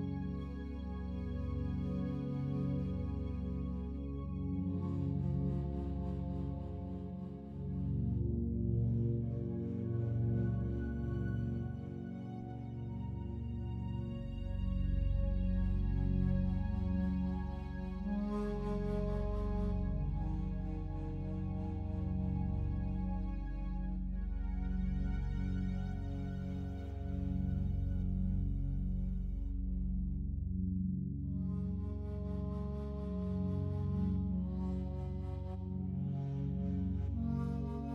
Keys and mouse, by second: 0.2 ctrl+alt+drag, 0.7 alt+shift+click, 2.1 click, 2.6 click, 3.4 alt+click, 4.2 alt+click, 4.6 alt+shift+click, 5.0 ctrl+alt+click, 5.7 alt+click, 8.9 click, 11.0 click, 12.9 click, 14.3 f, 14.7 click, 15.8 click, 16.4 alt+click, 17.8 typing, 18.2 click, 18.7 click, 19.7 click, 20.3 click, 20.7 click, 21.2-24.8 alt+drag, 22.1 typing, 25.9-27.2 drag, 27.6 click, 28.9 f, 29.3 click, 30.0-31.5 drag, 31.8-32.9 alt+drag, 33.8 ctrl+alt+click, 33.8 typing, 34.1 ctrl+alt+click, 34.6 alt+click, 35.5 click, 36.3-37.9 alt+drag.